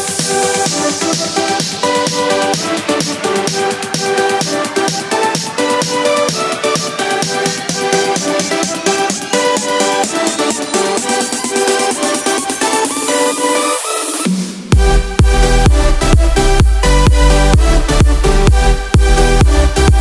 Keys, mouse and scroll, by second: 5.1 KP_0, 12.1-14.0 middle drag, 14.7-15.8 middle drag.